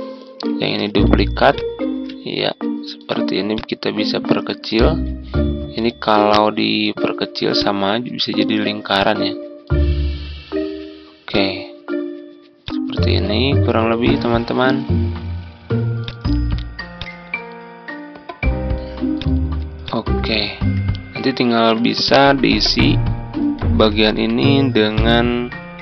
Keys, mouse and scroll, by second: 0.7 ctrl+d, 1.5 click, 3.5-13.5 drag, 13.7-14.1 ctrl+scroll up 1, 15.9 click, 19.8 shift+click, 20.2-22.2 drag, 22.4 ctrl+scroll down 1, 24.0-24.9 ctrl+scroll down 1, 24.9-25.8 drag.